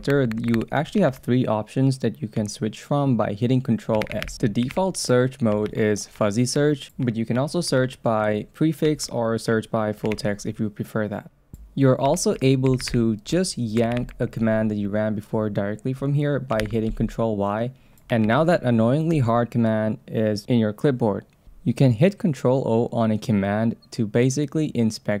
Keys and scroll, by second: 0.0 BackSpace, 1.1 ctrl+s, 5.7 ctrl+s, 9.0 ctrl+s, 10.1 ctrl+c, 13.9 Down, 15.9 Up, 16.6 ctrl+y, 18.2 super+v, 21.4 BackSpace.